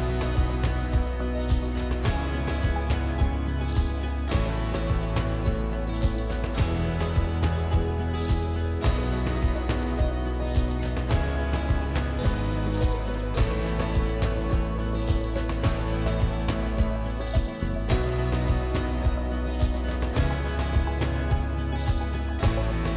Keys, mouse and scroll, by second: 0.6 middle click, 0.7 middle click, 3.2 click, 5.7 scroll, 6.0 click, 10.3 click, 12.3 right click, 12.3 w, 16.5 right click, 16.5 a, 17.6 click, 19.6 click.